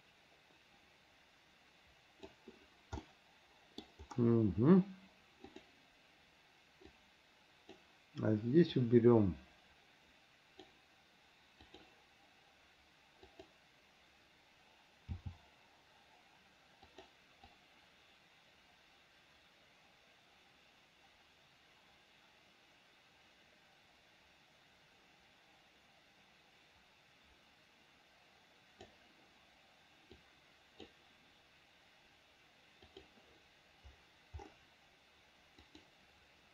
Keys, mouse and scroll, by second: 3.2 middle click, 5.8 click, 7.1 click, 9.1-10.9 drag, 13.4 click, 15.4 g, 17.7-29.1 drag, 30.3 click, 33.1 click, 35.8 click.